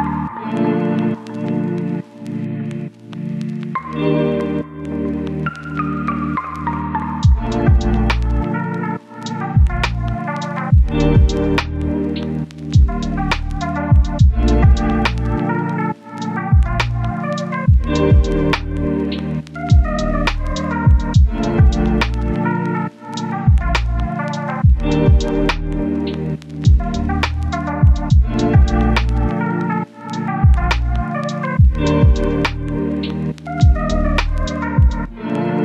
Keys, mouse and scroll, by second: 0.2 click, 0.7 right click, 1.4 click, 1.6 scroll down 1, 1.7-2.3 scroll up 1, 2.3 click, 2.5 right click, 2.9 click, 3.4-4.1 scroll up 1, 4.1 click, 5.2 scroll down 1, 5.4-10.6 scroll up 1, 10.6 click, 10.9 scroll down 1, 11.1-11.7 scroll up 1, 11.7 click, 12.6 scroll down 1, 12.8-13.2 scroll up 1, 13.2 click, 14.1 scroll down 1, 14.2-15.6 scroll up 1, 15.6 click.